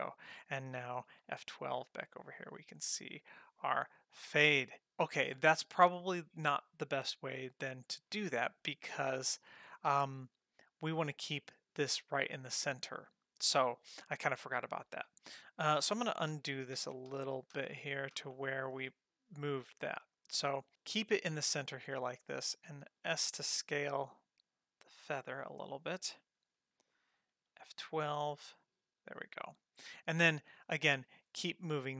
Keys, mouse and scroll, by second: 1.4 F12, 2.9-4.5 scroll up 8, 4.5 middle click, 16.4 ctrl+z, 16.8 ctrl+z, 17.2 ctrl+z, 17.6 ctrl+z, 18.2 ctrl+z, 23.0 alt+s, 27.8 F12, 29.6 scroll down 1, 31.1 g.